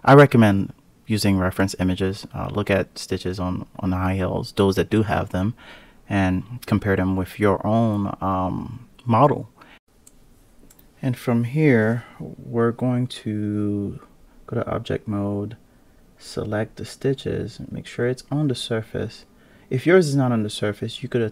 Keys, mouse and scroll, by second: 0.3-0.8 scroll down 3, 0.8-1.1 scroll up 2, 1.1-1.4 scroll down 6, 1.4-2.6 scroll up 7, 2.6 ctrl+a, 4.6 ctrl+a, 7.2-7.6 scroll down 9, 7.6 click, 8.2 click, 10.4-11.5 scroll down 1, 11.5 Tab, 11.8-12.7 scroll up 4, 12.7 click, 13.6 KP_Decimal, 14.8 click, 15.2 scroll down 1, 15.5-16.6 scroll up 1, 16.6 click, 19.2-20.4 scroll up 4, 20.4 click.